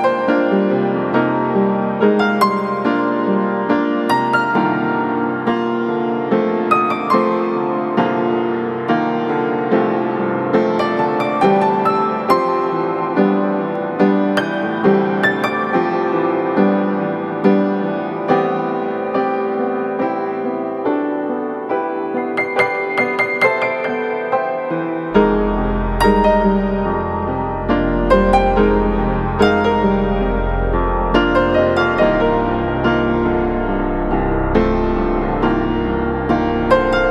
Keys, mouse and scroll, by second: 2.6 scroll down 1, 2.7-4.0 scroll up 2, 2.9 click, 4.1 click, 6.3 scroll down 1, 6.4-7.0 scroll up 2, 6.7 click, 7.0 click, 13.1 click, 13.9 right click, 14.3 scroll up 1, 14.5 right click, 15.1-16.1 scroll up 1, 16.1 click, 18.3 click, 23.1 scroll down 1, 23.2-24.5 right drag, 24.5 scroll down 1, 24.8 right click, 25.5 scroll up 1, 25.8 scroll down 1, 25.9-26.3 scroll up 1, 26.3 right click, 26.9 click, 32.3 right click, 33.2 scroll down 1, 33.4 scroll up 1, 33.7-36.3 drag.